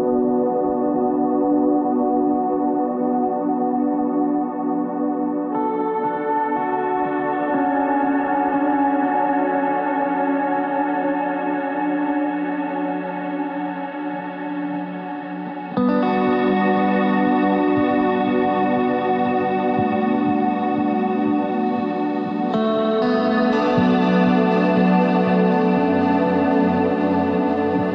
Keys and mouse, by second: 1.6 Tab, 2.8 Tab, 3.0 click, 4.0 ctrl+Tab, 4.7 z, 4.8 c, 5.7 z, 6.2 click, 7.6 s, 8.4 Tab, 10.4 Tab, 12.4 ctrl+r, 15.1 KP_3, 15.5 KP_1, 16.0 ctrl+Tab, 16.7 z, 16.9 c, 18.2 z, 19.2 s, 21.0 ctrl+Tab, 23.0 KP_3, 23.9 KP_1, 24.4 ctrl+Tab, 25.4 z, 26.1 c, 27.2 z.